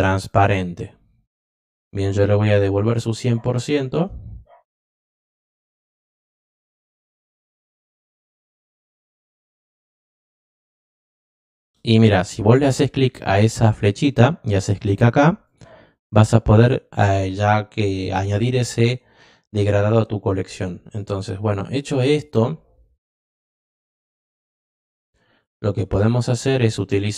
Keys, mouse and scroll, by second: 0.2 click, 4.0 right click, 5.8-6.8 drag, 7.7 click, 8.8 click, 10.3 click, 15.4 click, 23.9 click, 24.9-25.4 drag.